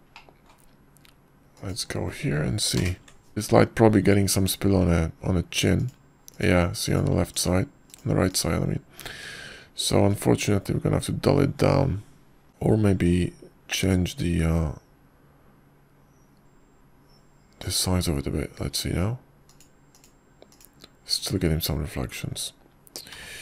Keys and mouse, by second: 1.2 click, 2.0 middle click, 2.3 drag, 4.2 click, 8.3 click, 10.2-11.4 drag, 12.0 click, 14.8 s, 15.6 click, 16.4 s, 23.0 click.